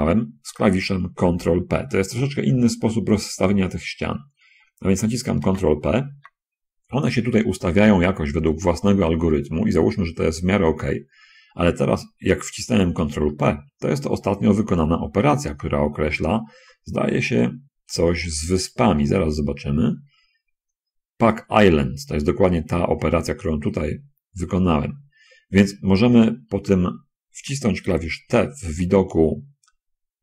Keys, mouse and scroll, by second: 5.7 ctrl+p, 8.6 middle click, 10.3 scroll down 1, 11.1 scroll down 1, 13.4 shift+click, 17.6 click, 18.9 click, 28.6 t.